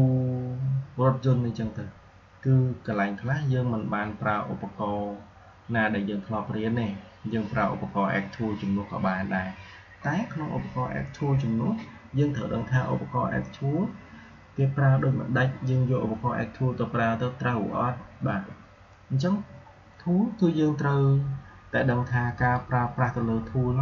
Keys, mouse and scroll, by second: 22.2 shift+Num_Lock, 22.4-23.8 shift+drag.